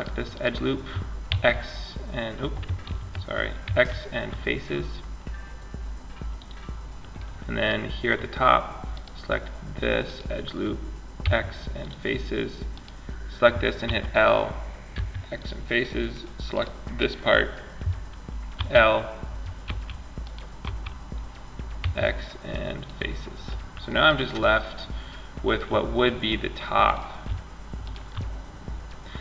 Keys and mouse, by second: 0.5 x, 2.1 ctrl+z, 2.9 x, 6.4 middle click, 8.1-11.1 drag, 10.4 x, 13.1 l, 14.1 x, 15.8-17.4 right drag, 17.8 l, 18.9 l, 19.8 l, 21.0 x, 27.0-28.1 drag.